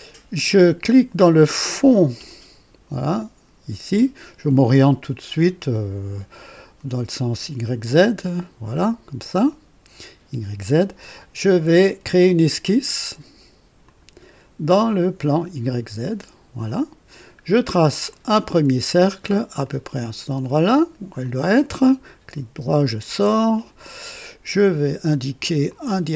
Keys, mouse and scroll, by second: 1.8 click, 7.2 click, 8.2 right click, 9.4 right click, 13.8 click, 15.2 click, 16.0 click, 18.0 click, 19.5 click, 21.1 click, 22.3 right click, 24.6 click, 25.6 click.